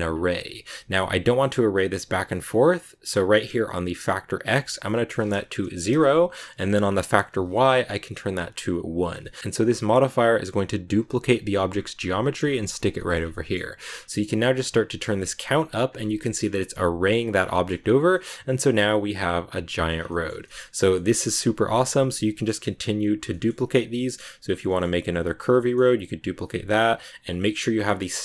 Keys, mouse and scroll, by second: 0.4-3.7 shift+middle drag, 4.6-8.4 drag, 9.0 scroll down 2, 9.1 middle click, 10.1 right click, 11.0 Tab, 11.4 a, 11.6 a, 12.5 Tab, 12.9 shift+middle click, 13.1 scroll down 1, 13.2 middle click, 13.9-14.5 scroll up 1, 14.5-16.1 drag, 16.1 middle click, 16.4 a, 17.3 scroll down 2, 17.4 middle click, 17.6 scroll up 3, 18.0-19.8 middle drag, 19.8 scroll down 4, 20.0-21.9 middle drag, 21.9 KP_7, 23.0 right click, 23.2 shift+middle click, 24.0 right click, 24.3 right click, 24.6-25.6 shift+middle drag, 25.6 shift+scroll down 3, 26.2 shift+d.